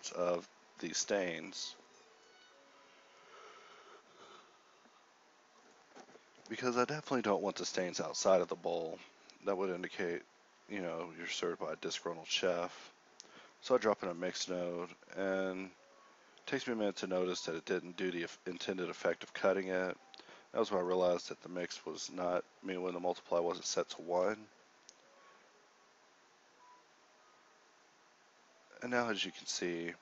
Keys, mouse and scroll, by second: 0.6 click, 1.8 shift+a, 3.2 click, 3.7 g, 11.2 g, 11.7 g, 12.0 shift+a, 16.0 g, 16.5-18.6 drag, 20.7-22.2 drag, 22.7-24.6 drag, 24.6-25.6 middle drag, 28.4 click, 29.3 g, 29.3 shift+a.